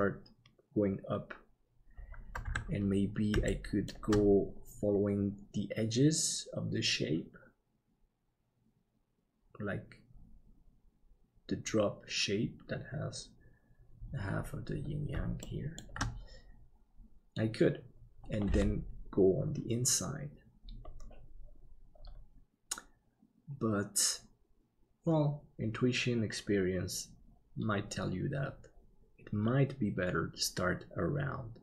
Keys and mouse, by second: 3.5 shift+middle click, 15.4 shift+middle click.